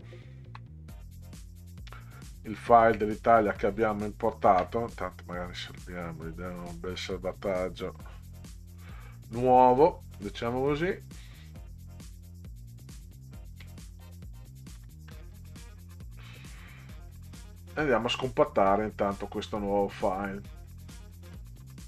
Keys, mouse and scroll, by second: 0.1-0.6 ctrl+scroll down 2, 2.6 middle click, 3.4 middle click, 4.1-4.4 ctrl+scroll down 2, 6.8 click, 8.4 click, 13.0 click, 14.8 9, 15.0 KP_Enter.